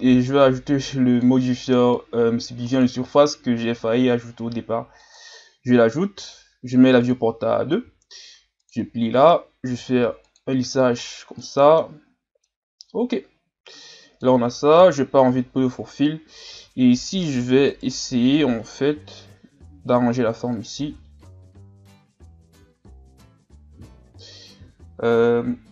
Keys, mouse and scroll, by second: 0.4-3.6 drag, 5.2-6.6 drag, 7.0-9.7 drag, 9.7 w, 11.0-11.4 scroll down 2, 11.4 middle click, 11.9-12.4 scroll up 4, 12.4-14.8 middle drag, 14.8 KP_3, 15.6 scroll down 3, 16.0-16.5 scroll up 1, 16.5 Tab, 17.7 alt+right click, 18.9 g, 20.9 Tab.